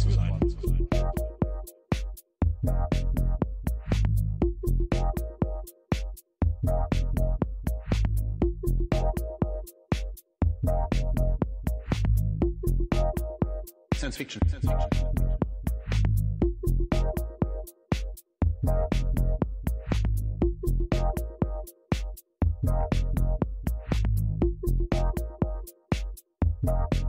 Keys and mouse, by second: 0.4 4, 4.9-7.3 drag, 6.8 0, 11.2-12.4 drag, 13.5 click, 14.1-15.3 drag, 16.5-17.5 drag, 21.2 click, 23.5 click, 26.6-27.0 drag.